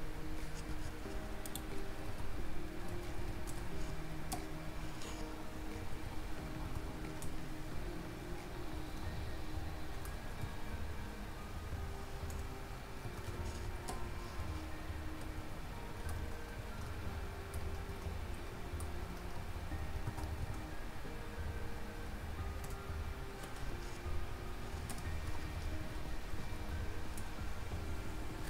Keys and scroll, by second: 13.1 ctrl+z.